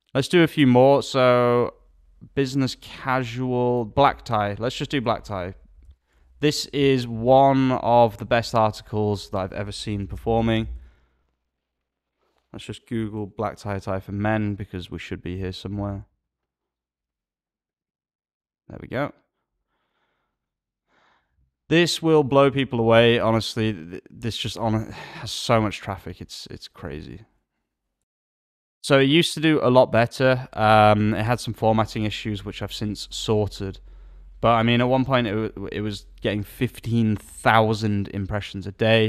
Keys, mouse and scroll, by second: 4.7 alt+a, 22.2 alt+a.